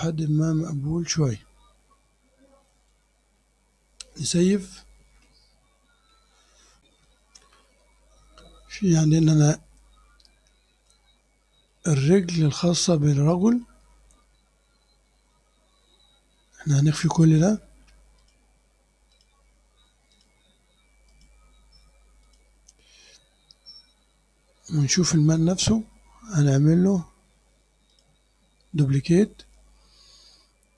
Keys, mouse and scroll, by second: 0.0 middle click, 0.3-1.4 drag, 2.3 scroll down 2, 2.7 click, 4.8 ctrl+s, 6.9 super+r, 11.2-11.6 scroll up 2, 11.7 click, 13.0 scroll down 1, 13.1 click, 17.0 click, 18.2 click, 19.2 click, 20.2 click, 21.2 click, 22.3 click, 24.9 click, 28.0 click.